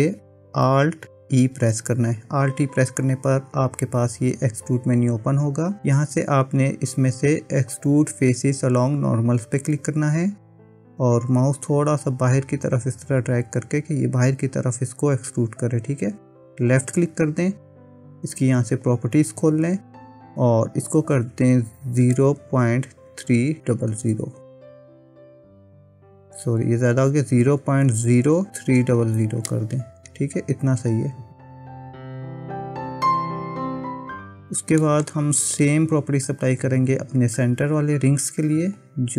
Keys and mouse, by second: 1.5 alt+e, 18.9 click, 20.8-31.0 drag, 23.8 KP_0, 29.0 KP_0, 32.9-34.4 middle drag, 34.5 middle click, 35.1 click, 38.9 click.